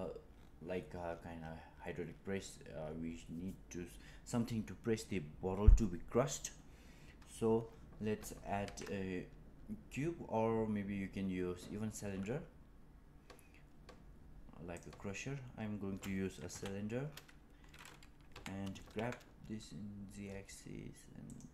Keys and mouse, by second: 8.5 shift+a, 16.4 KP_1, 18.2 g.